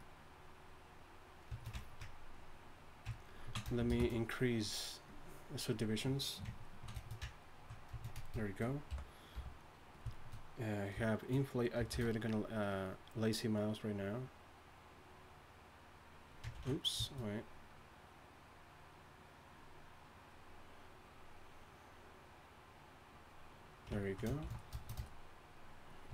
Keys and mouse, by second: 3.9 shift+space, 8.9 i, 9.3 f, 11.9 shift+s, 12.7-15.1 drag, 16.6 ctrl+z, 17.6-19.7 drag, 20.2-21.0 middle drag, 21.0-24.0 drag, 24.0 middle click, 24.4 shift+s.